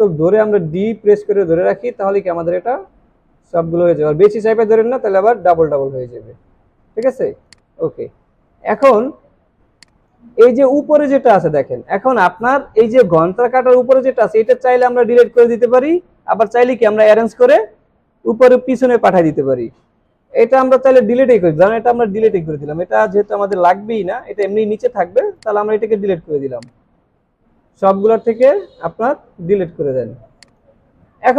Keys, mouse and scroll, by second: 8.4 alt+scroll up 1, 9.3-9.7 alt+scroll up 3, 22.2 Delete, 25.9 Delete, 27.2 scroll down 1, 28.1 alt+scroll down 1.